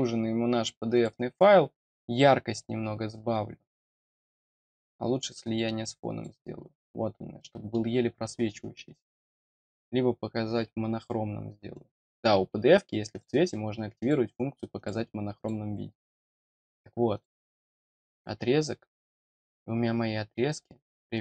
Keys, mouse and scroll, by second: 0.9 click, 4.5-6.2 drag, 6.8 middle click, 7.4 middle click, 9.4 click, 10.4-11.6 scroll down 1, 11.7 click, 13.1 click, 14.0 click, 14.8 click, 15.4 click, 17.1 click, 18.0 click, 18.6-19.1 scroll up 4.